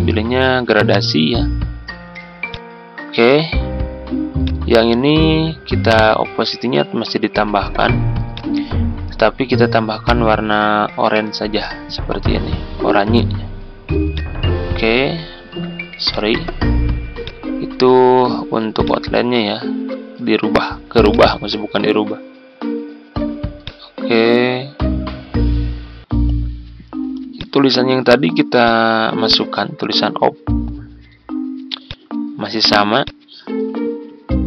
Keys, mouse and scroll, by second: 15.4 ctrl+z, 16.0-31.8 drag, 33.0 click, 34.1 Tab.